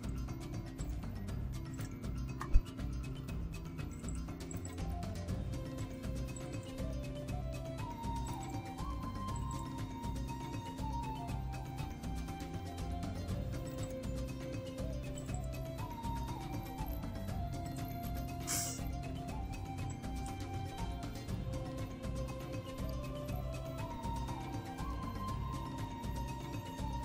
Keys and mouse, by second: 0.8 click, 1.7 click, 3.9 click, 4.5 click, 5.8 click, 6.4 click, 8.2 click, 9.3 click, 13.6 click, 15.2 click, 17.6 click, 19.9 click, 21.8-24.8 drag.